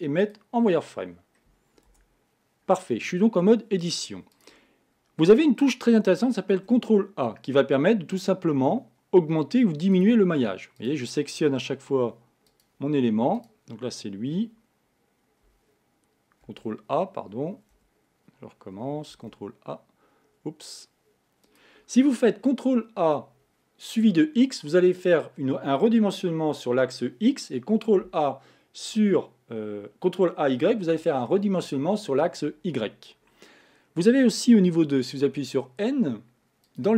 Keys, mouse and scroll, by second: 1.1-1.9 scroll up 1, 1.9 Tab, 2.3-4.2 scroll up 1, 4.2 scroll up 1, 4.3 click, 6.6 ctrl+a, 10.8 click, 12.5 click, 13.3 click, 15.5 ctrl+r, 19.2 ctrl+a, 35.3 n, 36.7 click.